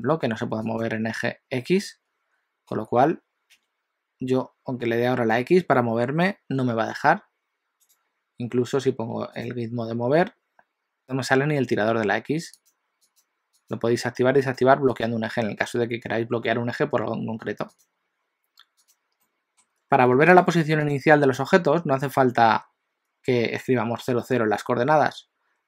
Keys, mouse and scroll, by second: 0.6 click, 2.7 g, 9.5 click, 12.6 click, 13.2 click, 13.7 click, 14.5 click, 15.1 click, 19.0 click, 19.4 middle click, 20.3 g.